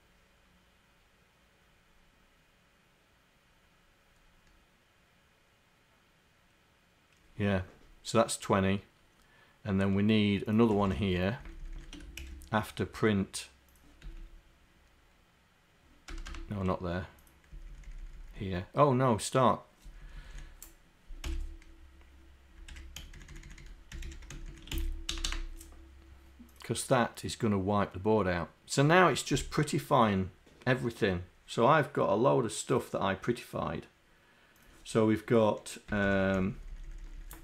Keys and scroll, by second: 35.9 Home, 36.1 Home, 36.4 shift+Down, 36.6 shift+Down, 37.0 shift+Down.